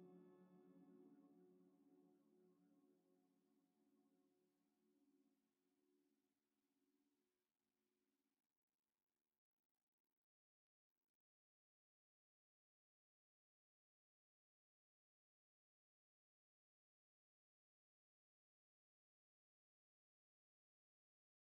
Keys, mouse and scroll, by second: 7.1 z, 20.0 x.